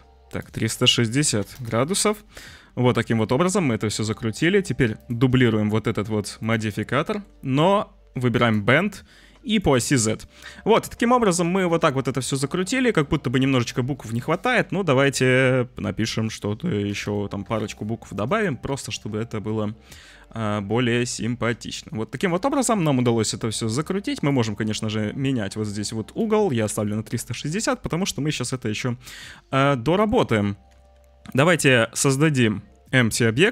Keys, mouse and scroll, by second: 0.3-1.6 drag, 2.3-3.7 drag, 5.0-6.5 drag, 7.1 click, 8.4 click, 9.6 click, 10.2-12.9 drag, 13.2 Tab, 16.8 c, 17.0 h, 17.4 Tab, 18.2-18.6 drag, 18.7 `, 20.9-22.6 drag, 24.2-26.2 drag, 27.6 click, 31.6 shift+a.